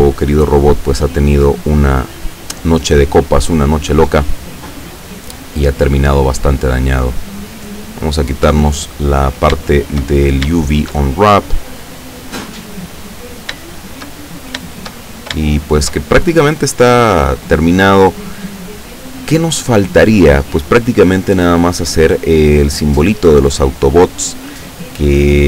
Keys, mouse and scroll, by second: 7.0 click, 8.5 Escape, 9.2-9.5 scroll down 2, 9.7-10.2 shift+middle drag, 10.3 shift+scroll down 1, 10.6-11.1 shift+middle drag, 11.1-13.4 shift+middle drag, 13.5-13.8 scroll down 2, 13.8-14.2 shift+middle drag, 14.3-14.6 shift+scroll up 2, 15.2-15.5 shift+scroll down 2, 15.5-16.1 shift+middle drag.